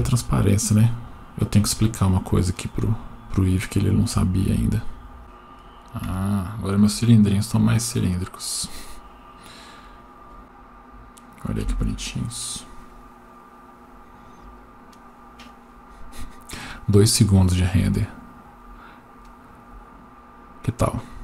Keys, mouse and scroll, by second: 0.6 click, 1.1-2.3 scroll down 6, 2.6-5.2 drag, 5.2 Down, 6.1 Tab, 7.7-8.9 scroll up 1, 8.9 click, 9.8 click, 14.1 F12.